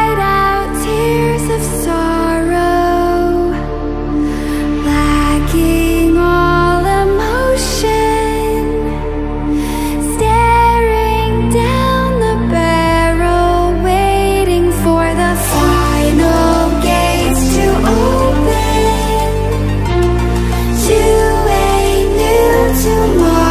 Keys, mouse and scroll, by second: 5.3-6.9 ctrl+alt+scroll down 2, 6.9 click, 9.7 ctrl+alt+scroll down 1, 10.3 ctrl+alt+scroll up 1, 11.7-15.2 drag.